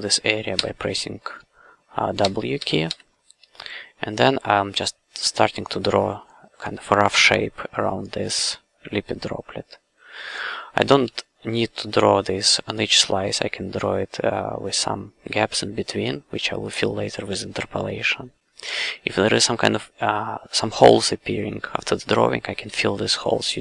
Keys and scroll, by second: 2.2 w, 11.0 f.